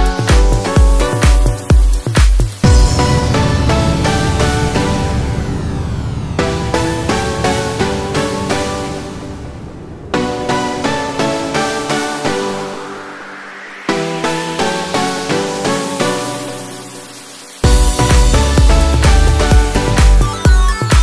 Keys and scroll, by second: 11.1 ctrl+t, 14.3 ctrl+h.